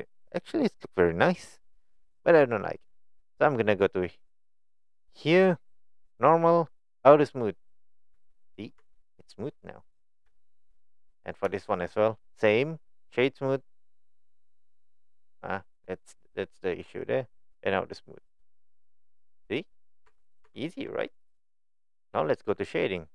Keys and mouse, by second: 5.3 click, 6.1 click, 7.3 click, 8.1 Tab, 8.4 middle click, 8.8 Tab, 9.1-10.1 middle drag, 10.4 shift+middle drag, 11.0 click, 11.5 shift+middle drag, 12.5 right click, 14.7-15.5 middle drag, 15.8 middle click, 18.0 click, 19.1-19.9 middle drag, 20.0 Tab, 20.4 Tab, 20.7 click.